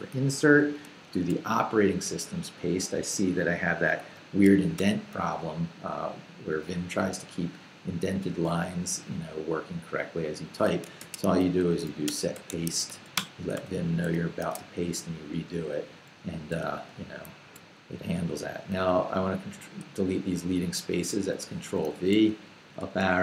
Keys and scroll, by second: 1.1 super+v, 3.9 Escape, 4.8 u, 10.8-13.5 typing, 14.1 super+i, 14.4 super+v, 15.8-18.1 typing, 20.9 ctrl+v, 21.7 ctrl+k.